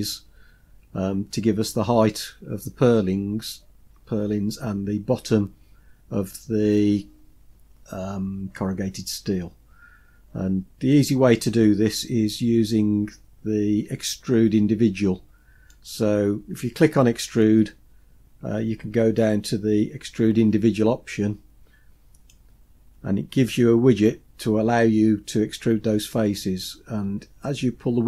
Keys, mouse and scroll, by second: 15.7-22.3 drag, 26.6-28.0 drag.